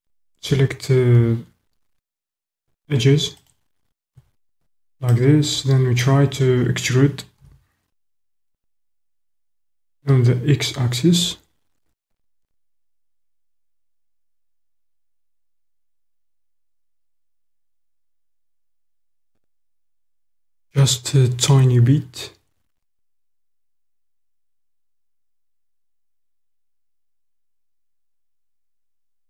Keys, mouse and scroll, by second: 3.3 alt+click, 5.1 click, 5.3 middle click, 7.4 e, 9.5 x.